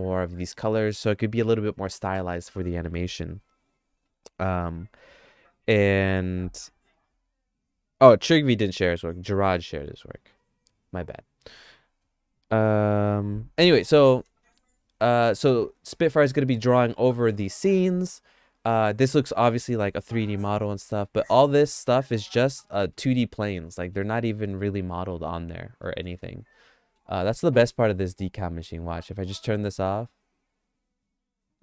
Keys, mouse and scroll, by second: 13.9 middle click, 14.6 shift+middle click, 17.2 middle click, 18.8 middle click, 19.8 middle click, 20.4 shift+middle click, 21.1 middle click, 21.7 middle click, 22.1 shift+middle click, 22.6 middle click, 23.0 shift+middle click, 23.7 middle click, 25.9 middle click, 26.2 shift+middle click.